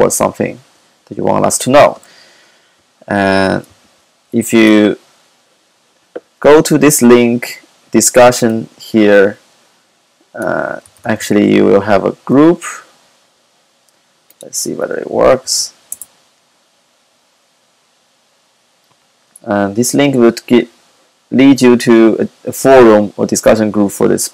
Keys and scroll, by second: 11.2 super+c.